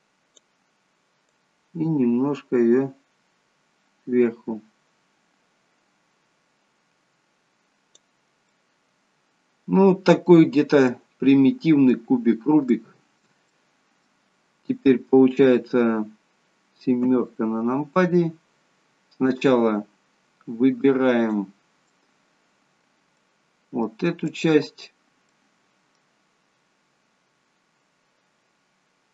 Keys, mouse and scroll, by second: 1.4 click, 8.6 middle click, 10.6 scroll down 3, 10.9 middle click, 12.8 shift+middle click, 13.6 middle click, 17.1 KP_7, 21.2 click, 21.7-23.3 scroll up 2, 22.0 middle click, 24.3 click, 25.3 middle click.